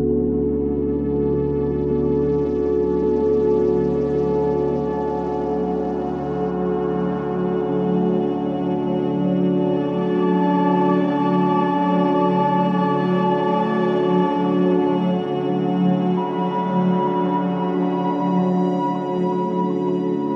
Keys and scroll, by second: 3.5 5, 4.4 4, 13.0 3.